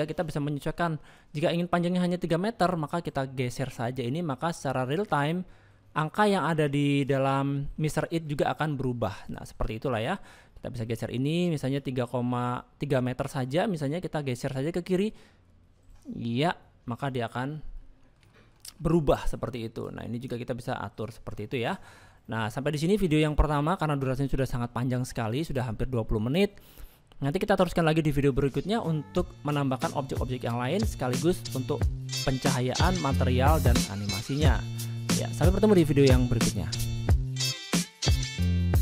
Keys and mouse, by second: 9.9 middle click, 10.4 shift+middle click, 11.2 shift+middle click, 12.2-17.3 shift+drag, 18.0 middle click, 18.6 shift+middle click, 19.3 middle click, 20.1 click, 20.4 middle click, 21.3 middle click, 23.1 middle click, 23.9 shift+middle click, 27.0 shift+middle click, 30.2 middle click, 31.2 shift+middle click, 31.7 middle click, 34.1 shift+middle click.